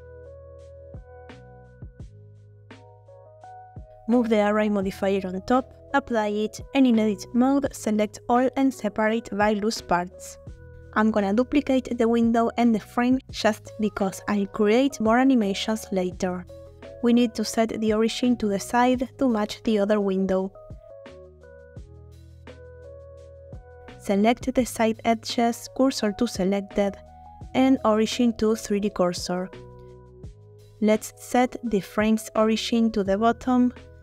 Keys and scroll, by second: 2.7 Tab, 6.1 Tab, 6.6 a, 7.4 F3, 7.7 typing, 9.7 Tab, 12.8 shift+d, 13.3 shift+Escape, 18.2 Tab, 21.1 2, 24.9 shift+s, 26.9 Tab, 32.9 Tab.